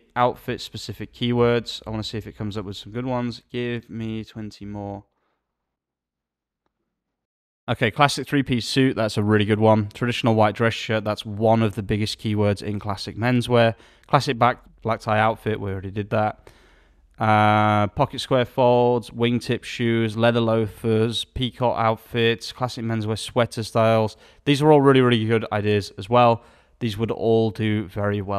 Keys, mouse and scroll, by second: 0.4 alt+a.